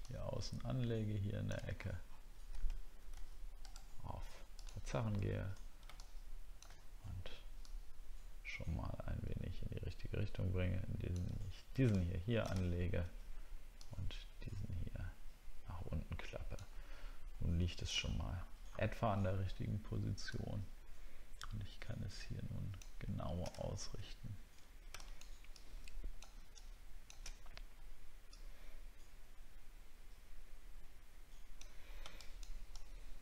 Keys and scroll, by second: 1.7 alt+scroll down 1, 12.7 alt+scroll down 6, 17.9 alt+scroll up 1, 18.7 alt+scroll up 1, 23.5 alt+scroll up 4.